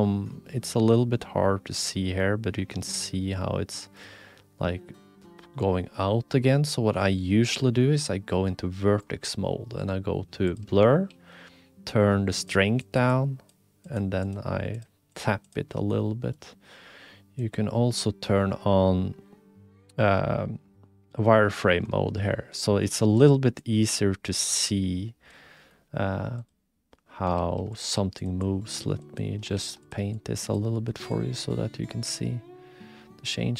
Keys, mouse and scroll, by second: 0.8-3.9 drag, 3.9-5.9 middle drag, 5.9-7.0 drag, 7.0-8.8 middle drag, 8.8 click, 9.0-10.4 middle drag, 10.4 click, 10.5 middle click, 11.0 shift+f, 12.8 click, 13.1 click, 13.8 click, 14.2 click, 14.7 click, 15.1 click, 15.4 click, 15.7 middle click, 17.5 click, 21.6 shift+middle click, 22.2 middle click, 23.2 click, 23.6 click, 24.1 click, 24.1 middle click, 24.1 right click, 24.5 click, 25.5 click, 26.3 click, 27.3 shift+f, 27.9 f, 28.4 click, 29.0 click, 29.5 ctrl+f, 30.1 click, 30.7 middle click, 31.1-33.5 drag.